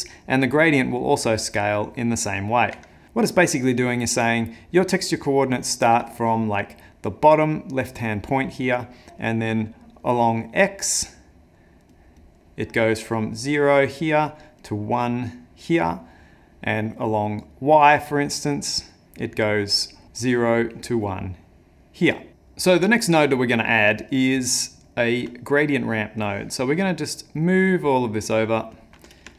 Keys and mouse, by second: 22.3 middle click, 23.5 middle click, 24.0 ctrl+middle click, 26.2 click, 27.5 click, 28.7 click.